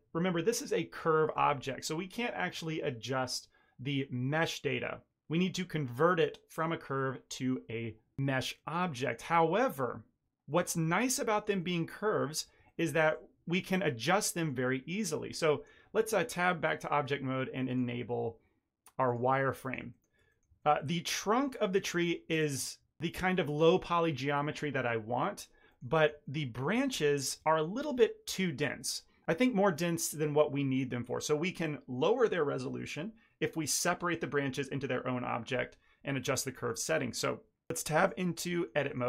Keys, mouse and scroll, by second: 1.2 middle click, 1.6 shift+middle click, 8.5 shift+middle click, 8.9 shift+middle click, 9.3 ctrl+middle click, 10.4 ctrl+middle click, 10.7 shift+middle click, 11.2 middle click, 11.5 ctrl+middle click, 12.1 middle click, 12.6 ctrl+middle click, 12.9 shift+middle click, 15.9 Tab, 17.6 click, 19.5 middle click, 19.8 ctrl+middle click, 20.2 middle click, 20.5 shift+middle click, 20.7 ctrl+middle click, 21.0 ctrl+middle click, 21.2 shift+middle click, 21.4 middle click, 25.6 middle click, 25.8 shift+middle click, 26.1 ctrl+middle click, 26.7 shift+middle click, 26.9 ctrl+middle click, 27.3 shift+middle click, 35.9 scroll down 3, 36.2 middle click, 36.5 shift+middle click, 37.9 Tab, 38.5 shift+middle click, 38.8 middle click.